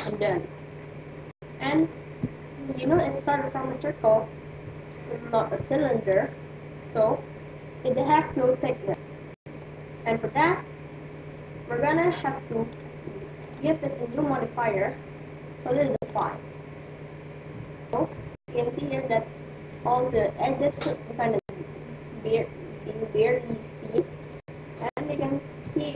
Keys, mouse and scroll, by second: 2.1-4.1 middle drag, 11.5 a, 12.7-15.3 drag, 17.6-19.5 middle drag, 24.3-25.9 middle drag.